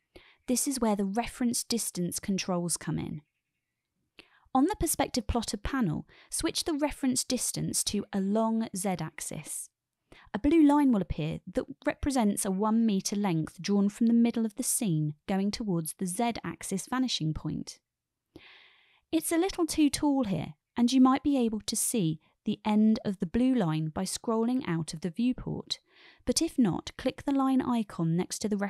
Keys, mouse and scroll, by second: 7.6-9.2 drag, 26.1 click, 28.4-28.6 drag.